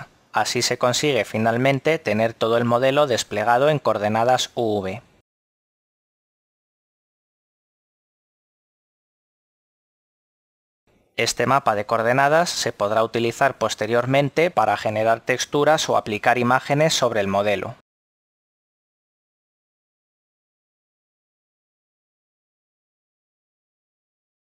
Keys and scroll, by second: 5.8 a, 10.0 a, 12.3 r, 14.3 9, 15.3 0, 16.5 Return, 19.0 a.